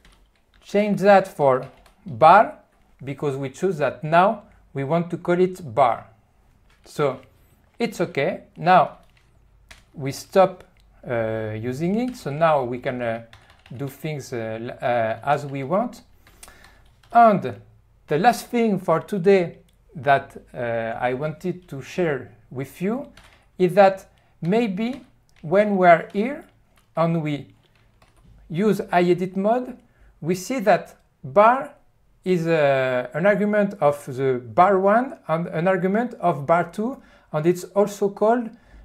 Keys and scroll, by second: 0.0-1.8 typing, 9.7 ctrl+F1, 12.1-14.0 typing, 15.4-17.6 typing, 23.6 n, 25.4 e, 26.3 q, 28.1 ctrl+F1.